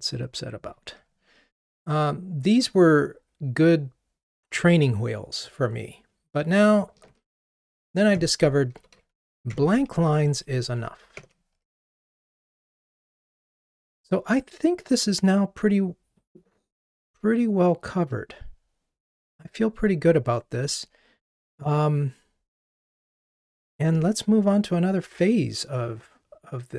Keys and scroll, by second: 8.2 super+BackSpace, 10.3 super+BackSpace.